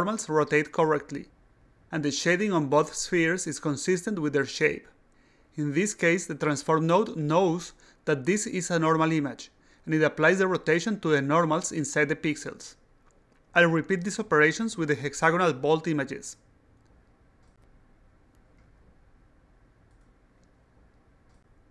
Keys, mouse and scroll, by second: 16.6-17.8 drag, 17.9 click, 18.8 click, 19.5-21.6 drag.